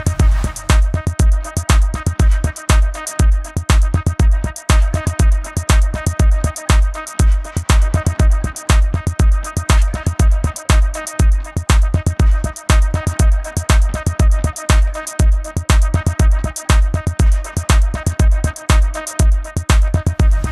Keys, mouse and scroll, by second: 0.0 ctrl+alt+click, 1.4 a, 3.4 click, 5.5 ctrl+z, 6.1 click, 8.1-9.0 typing, 8.7 click, 9.3 click, 12.0 ctrl+shift+], 14.0 ctrl+z, 14.3 shift+click, 15.4 click, 18.8-19.7 typing, 19.3 click.